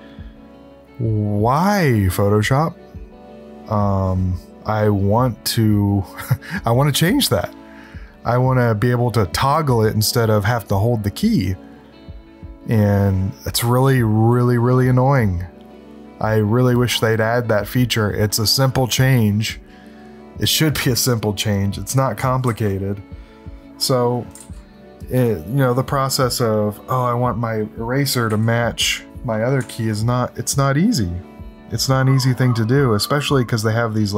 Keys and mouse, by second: 21.5 click, 22.4 ctrl+z, 24.3 ctrl+z, 28.3 e, 29.6 ctrl+z.